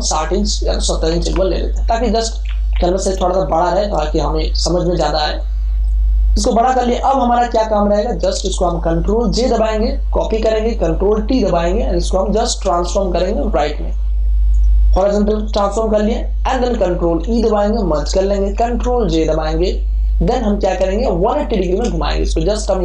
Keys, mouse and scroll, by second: 0.0 click, 1.0 7, 1.3 0, 2.4 Return, 4.0 space, 4.2-8.1 ctrl+drag, 9.8 ctrl+j, 11.0 ctrl+t, 12.0 alt+click, 13.4 right click, 14.4 click, 14.8 Return, 17.2 ctrl+e, 19.2 ctrl+j, 20.2 ctrl+t, 20.8 ctrl+space, 21.0 ctrl+click, 21.7 space, 22.2-22.8 alt+drag.